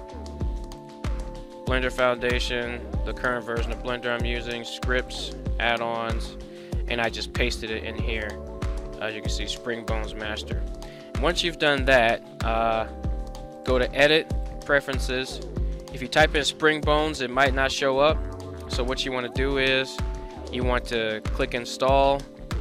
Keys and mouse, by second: 13.7-14.5 drag.